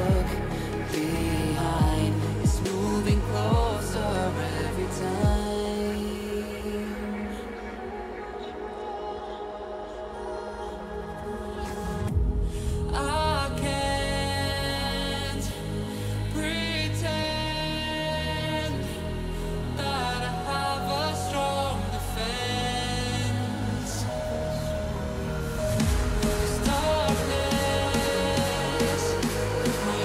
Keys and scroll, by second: 0.9 [, 13.8 [.